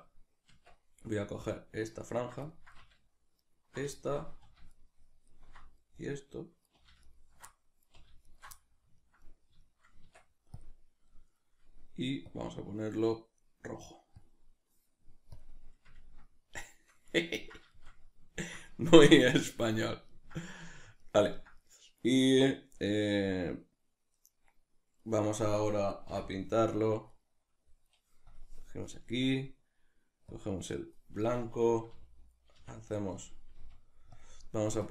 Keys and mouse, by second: 0.5 Tab, 1.4-2.5 right drag, 2.5 middle click, 3.4 alt+shift+right click, 4.0 middle click, 4.7-5.9 alt+right drag, 5.9 middle click, 7.1 alt+right click, 7.5 middle click, 8.3 alt+right click, 8.6-10.7 middle drag, 10.7 Tab, 12.3-16.0 drag, 16.0-27.2 ctrl+middle drag, 27.1 b, 27.2 right click, 28.3-32.6 drag, 32.6 f, 33.3 click, 33.6 f, 34.2 click.